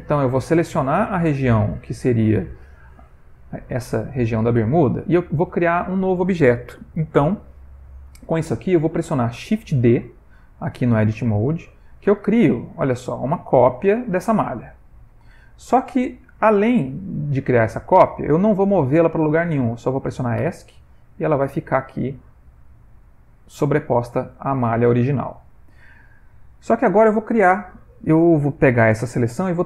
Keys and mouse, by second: 0.4 typing, 0.5 middle click, 1.0 middle click, 1.6 c, 3.5 middle click, 4.6 middle click, 5.3 ctrl+middle click, 5.4 ctrl+middle click, 5.9 middle click, 12.5 shift+d, 21.8 middle click, 23.0 middle click, 25.0 ctrl+middle click, 25.2 ctrl+middle click.